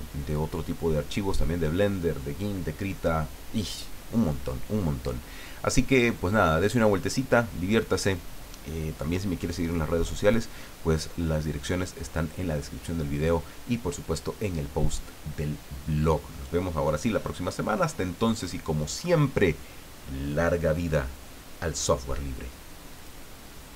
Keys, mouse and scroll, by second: 23.0 click.